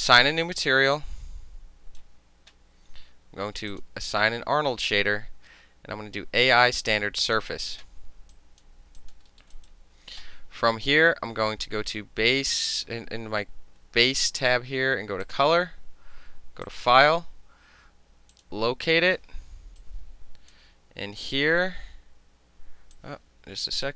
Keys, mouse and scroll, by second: 0.0 alt+click, 0.3 alt+middle drag, 0.5-2.1 right drag, 2.1-3.8 middle drag, 3.8 click, 3.9-7.3 middle drag, 7.3 click, 7.4-8.4 middle drag, 8.4 alt+drag, 8.7 alt+middle click, 9.1 alt+click, 9.2 alt+middle click, 9.5 alt+middle click, 9.6 alt+right click, 9.7-15.3 alt+middle drag, 15.3 alt+click, 15.4 alt+middle click, 16.7 click, 18.4 click, 19.9-20.6 drag, 23.0 click.